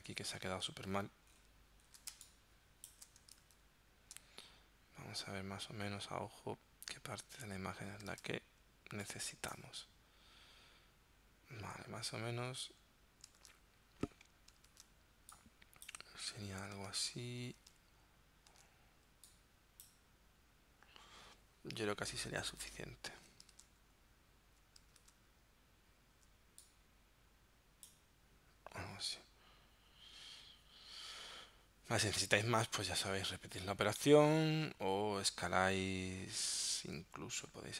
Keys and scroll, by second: 2.2 space, 3.4 super+Tab, 8.2 super+Tab, 13.4 super+Tab, 14.7 super+Tab, 16.9 super+Tab, 18.5 super+Tab, 23.5 super+Tab, 25.0 super+Tab.